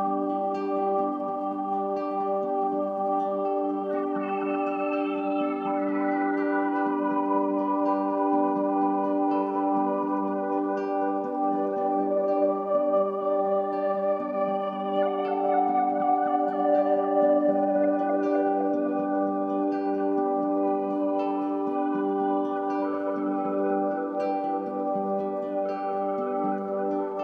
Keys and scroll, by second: 25.5 ctrl+d.